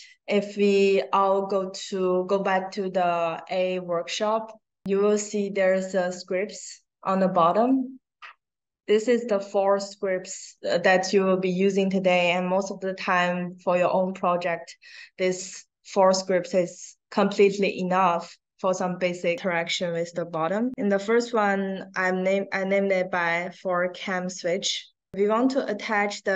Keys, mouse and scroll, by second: 7.3 click, 7.5 click, 21.3 click, 25.1-26.3 drag.